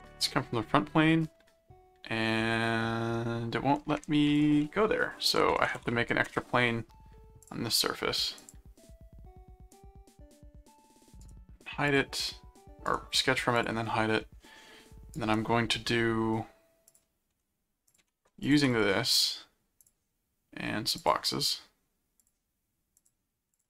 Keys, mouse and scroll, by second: 4.3 click, 5.1-6.3 typing, 7.4 click, 8.4 click, 9.7 right click, 11.2 right click, 11.8 click, 12.8 right click, 13.5 click, 15.1 right click, 16.9 click, 17.8-19.3 drag, 18.6 alt+c, 19.8 click, 21.0 click, 22.2 click, 23.0 click.